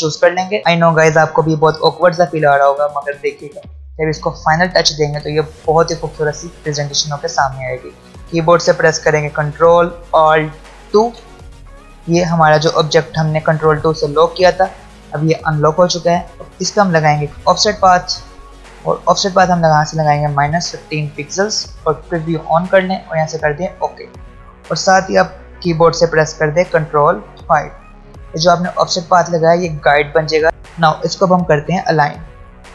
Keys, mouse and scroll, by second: 0.2 v, 0.6 space, 8.9 ctrl+Num_Lock, 10.7 ctrl+alt+2, 15.8 click, 18.9 ctrl+alt+scroll up 1, 21.1 ctrl+alt+scroll down 2, 22.0 click, 26.8 click, 30.4 alt+Num_Lock, 30.4 alt+scroll up 1, 31.3 space, 31.4 click, 32.5 alt+scroll down 1.